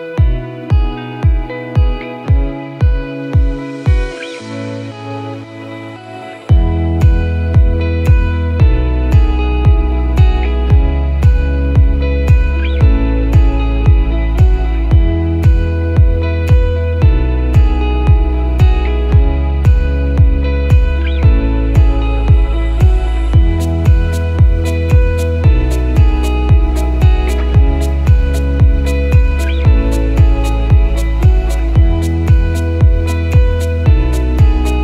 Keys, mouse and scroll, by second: 1.0-1.4 scroll up 1, 1.6 click, 5.9 Tab, 7.0-7.5 scroll down 1, 8.7 click, 10.5 click, 11.5 click, 11.6 Delete, 12.5 shift+a, 16.9 ctrl+z, 18.0 click, 19.4-19.8 scroll down 1, 19.9 shift+a, 26.1 click, 27.3 shift+a, 32.9 click, 33.5 ctrl+t, 34.7 click.